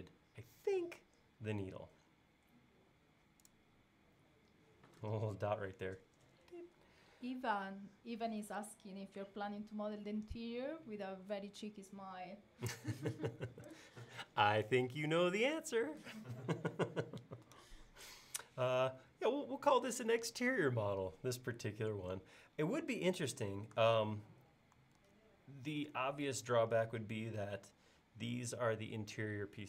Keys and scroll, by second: 25.0 super+Tab.